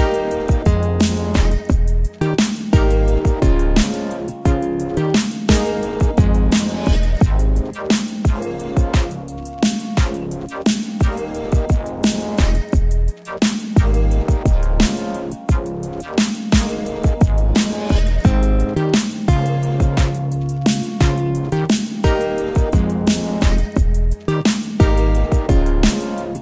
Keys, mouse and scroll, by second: 0.7 ctrl+z, 0.9 shift+click, 2.5 ctrl+t, 4.9-8.6 shift+drag, 13.3 click, 18.4 ctrl+0, 22.1 ctrl+0, 22.2-26.4 alt+drag.